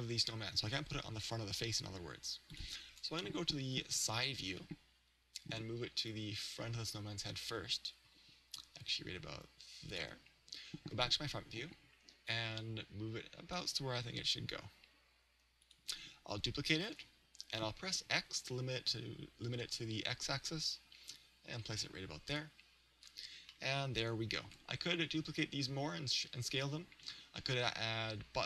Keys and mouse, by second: 2.7 click, 3.7 KP_3, 6.2 click, 8.1 g, 10.1 click, 10.9 KP_1, 12.3 click, 14.3 g, 15.8 click, 16.9 shift+d, 22.3 click, 23.5-25.3 middle drag.